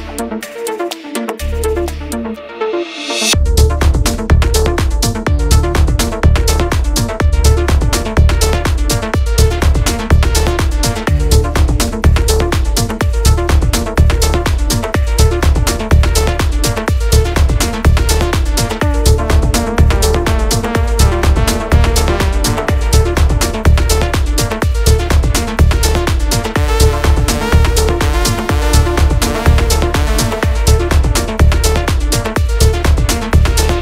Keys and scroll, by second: 4.7-9.2 typing, 11.8-13.9 typing, 31.9-33.0 typing.